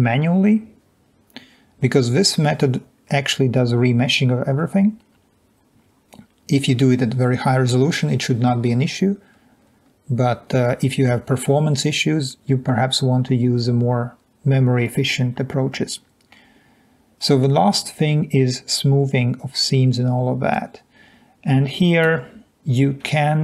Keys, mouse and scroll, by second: 9.8-10.5 scroll down 2, 15.8-17.4 scroll down 3, 17.4-17.9 scroll up 2, 17.9-18.4 scroll down 2, 21.8-22.5 drag.